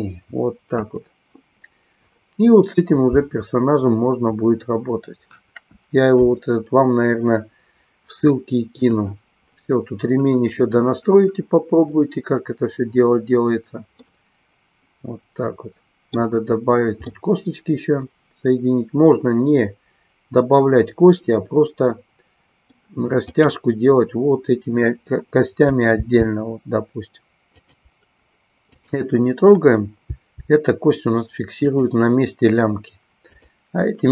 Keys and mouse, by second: 0.8 Delete, 5.3 KP_1, 14.1-16.3 middle drag, 17.1-22.8 middle drag, 27.6 click, 28.7-30.1 drag, 33.2-34.1 drag.